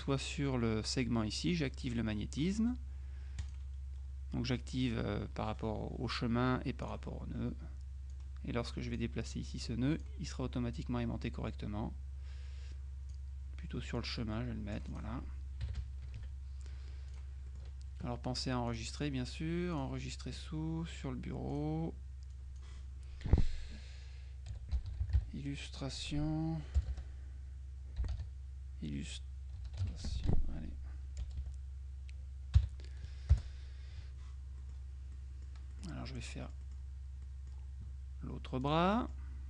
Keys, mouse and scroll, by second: 3.5 click, 6.9 click, 8.2 click, 10.8-13.7 drag, 14.0-15.5 drag, 15.7 KP_Subtract, 17.2 click, 17.6 right click, 18.8 click, 19.8 click, 21.6 click, 22.4 click, 24.4-25.8 typing, 26.9-31.3 typing, 32.7 n, 33.4 Return, 34.9 click, 35.8 click, 36.7-38.1 drag, 38.7 click.